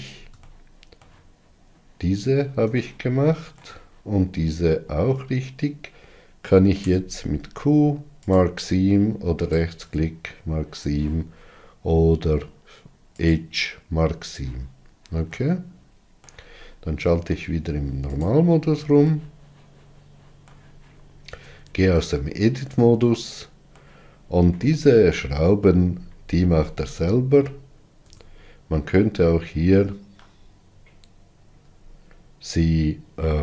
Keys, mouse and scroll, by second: 0.3 scroll down 3, 0.9-8.8 shift+middle drag, 8.8 q, 11.4-15.8 right drag, 15.8-18.6 middle drag, 18.6 click, 19.5-21.7 shift+middle drag, 21.7 Tab, 22.4-24.7 middle drag, 24.7-25.2 scroll down 4, 26.2-27.7 scroll up 10, 28.5 Tab, 29.6-30.1 scroll up 3, 30.5 alt+z.